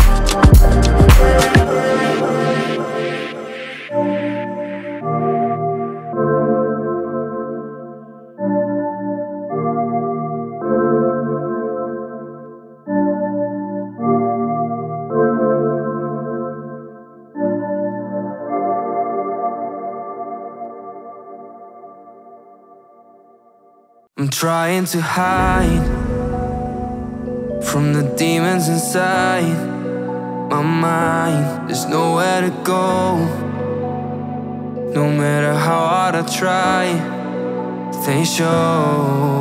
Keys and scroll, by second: 0.0 Down, 1.5 ctrl+space, 5.2-5.6 typing, 7.3 1, 7.5 Return, 9.7 shift+4, 10.7 BackSpace, 11.0 5, 11.1 0, 12.0 Escape, 13.6 9, 13.7 b, 14.2 Return, 15.6 a, 15.7 u, 15.8 t, 15.9 o, 16.1 Return, 17.8 Down, 19.6 Down, 21.4 Down, 22.3 Down, 25.5 ctrl+g, 26.0 space, 27.2 o.